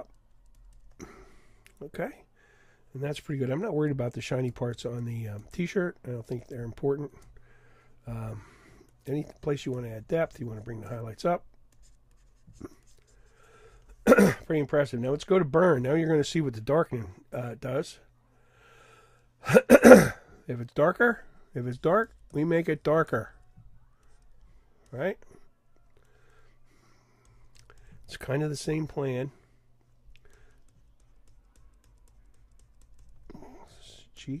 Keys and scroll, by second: 1.3 ], 1.8 ].